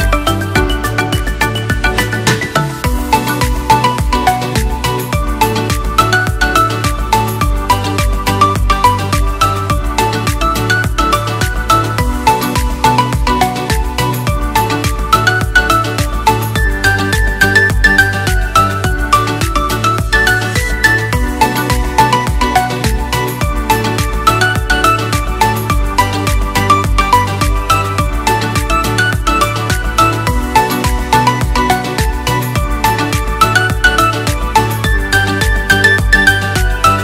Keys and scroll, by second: 4.6 Delete, 6.5 Delete, 33.1-33.7 typing, 34.4 ctrl+a.